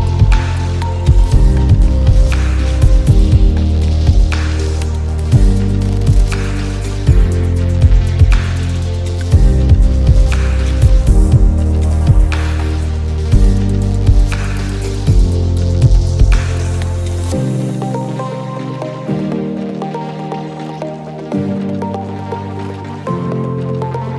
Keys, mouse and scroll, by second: 1.3 ctrl+z, 2.3 click, 6.8 click, 8.7 click, 9.6 click, 9.7 ctrl+z, 10.6 ctrl+z, 11.2 ctrl+z, 12.3 ctrl+shift+z, 12.6 shift+click, 19.0 click, 21.3 click, 23.7 click.